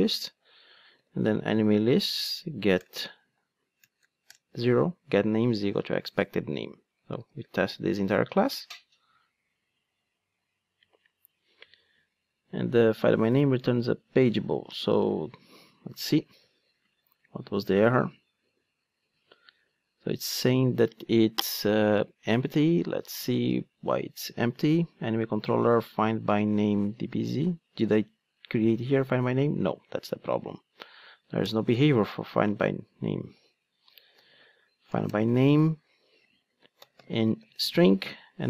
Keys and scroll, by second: 7.2 ctrl+d, 30.3 super+c, 31.8 super+v, 35.1 Return.